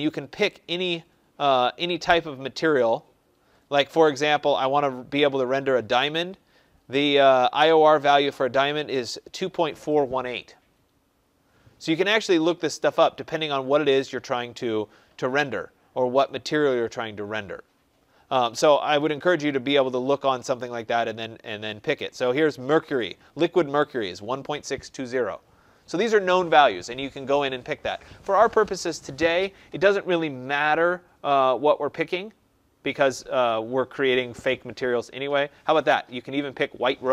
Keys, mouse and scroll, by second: 1.3-1.9 scroll, 1.9 scroll, 2.7 scroll, 2.9-3.3 scroll down 11, 3.3-4.3 scroll up 5, 11.7-12.1 scroll down 4, 12.1-12.8 scroll, 14.1 scroll, 14.8-16.1 scroll, 16.1-16.9 scroll, 16.9-17.3 scroll, 17.6 scroll, 19.3-19.7 scroll, 31.0 scroll, 32.5-33.4 scroll.